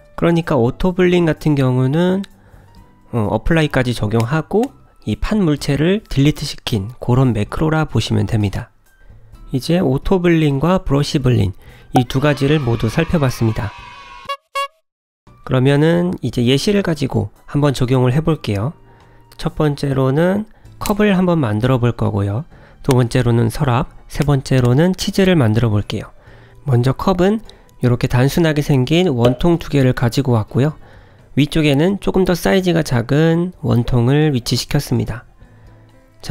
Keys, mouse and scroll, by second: 29.1 ctrl+z, 29.1 click, 30.3 click, 31.7 g.